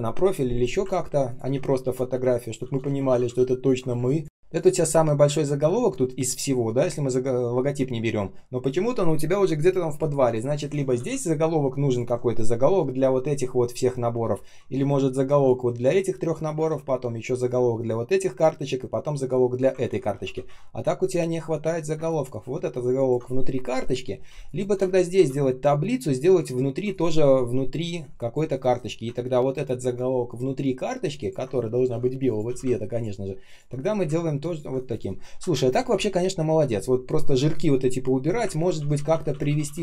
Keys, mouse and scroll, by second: 0.9 ctrl+scroll down 1, 1.2 ctrl+click, 1.4 ctrl+z, 2.3 ctrl+click, 2.5 ctrl+z, 3.6 ctrl+click, 3.8 space, 4.5 ctrl+click, 19.8 ctrl+z, 21.8 space, 22.9 ctrl+click, 24.2 space, 24.9 ctrl+click, 28.6 ctrl+shift+[, 31.1 ctrl+click, 31.8 i, 32.9 ctrl+click, 33.4 ctrl+click, 33.8 ctrl+alt+c, 34.4 ctrl+click, 34.7 ctrl+alt+v, 35.4 shift+Right, 35.8 shift+Down, 36.9 shift+Right, 38.5 ctrl+z.